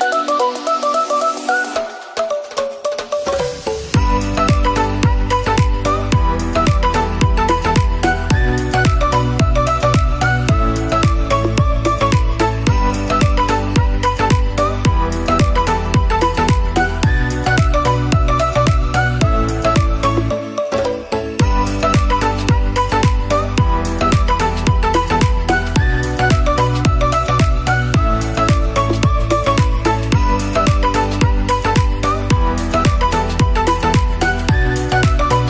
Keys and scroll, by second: 1.9 ctrl+z, 2.4 ctrl+z, 3.4 ctrl+z.